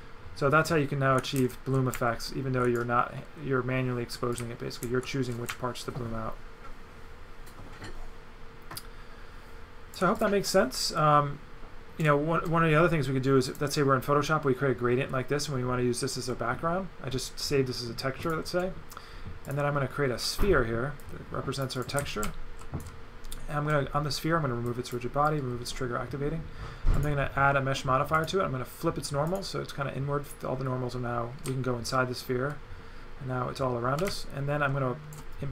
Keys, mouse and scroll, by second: 4.4 right click, 10.2 click, 13.5 click, 18.3 click, 19.4 click, 20.4 click, 21.0 click, 21.8 right click, 22.2 right click, 24.7 click, 25.3 click, 27.0 click, 28.1 click, 29.3 click, 31.4 right click.